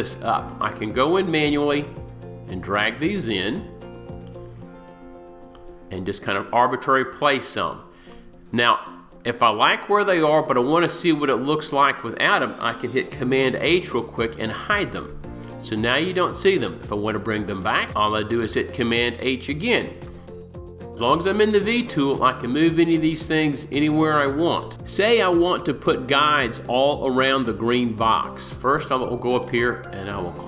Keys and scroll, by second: 13.3 super+h.